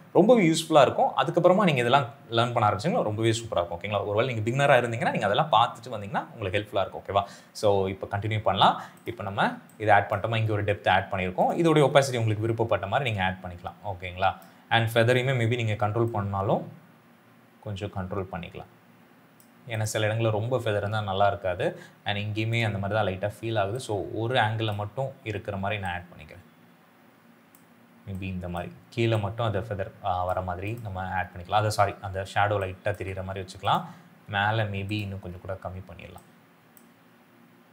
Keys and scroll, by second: 9.4 space, 12.1 t, 15.1 f, 32.3 space.